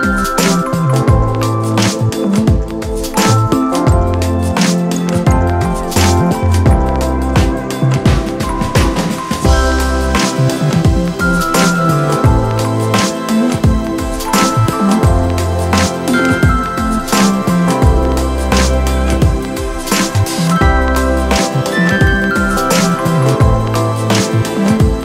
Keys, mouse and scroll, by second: 10.9 ctrl+click, 12.2 ctrl+click, 13.8 ctrl+click, 21.4 ctrl+click.